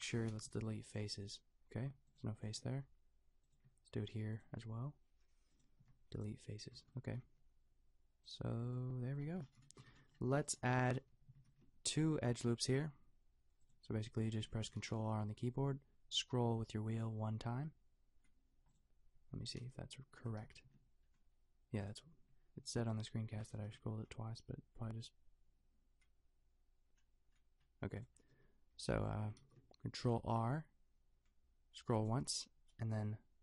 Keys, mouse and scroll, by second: 0.5 Delete, 2.1-6.8 drag, 2.7 g, 4.7 g, 5.8 Delete, 6.8 Tab, 7.2 g, 8.6 Tab, 9.3 a, 9.9 a, 11.5 ctrl+r, 13.7-18.0 drag, 14.7 ctrl+r, 18.8-21.8 drag, 19.5 s, 19.6 y, 20.5 ctrl+r, 21.9-22.9 drag, 23.2 click, 23.6 ctrl+r, 28.0-31.6 drag, 28.4 s, 29.4 ctrl+r.